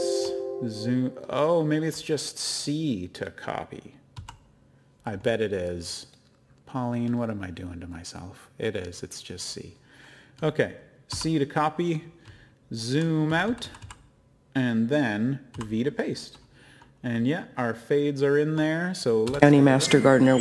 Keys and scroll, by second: 1.5 typing, 4.1 c, 12.2-13.8 typing, 15.2-16.0 typing.